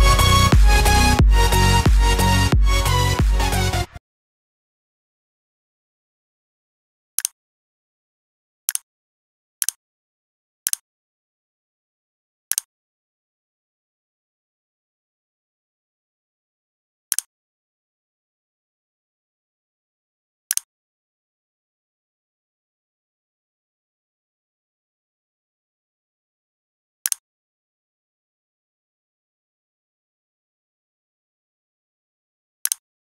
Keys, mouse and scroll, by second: 2.4 right click, 3.1 click.